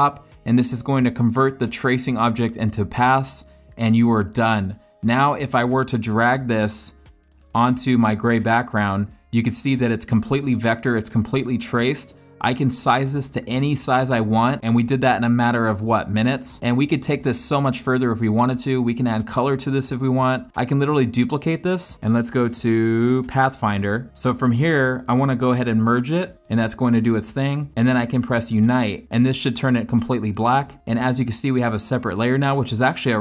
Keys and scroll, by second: 5.9 space, 7.4 space, 10.2 space, 16.7 space, 21.9 alt+shift+space, 29.9 space, 32.9 space.